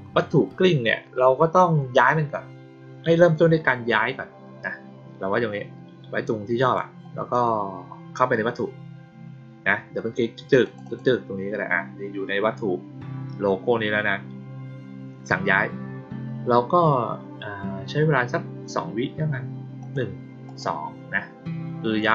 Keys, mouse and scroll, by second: 10.6 click, 10.8 click, 19.7 click, 20.4 click.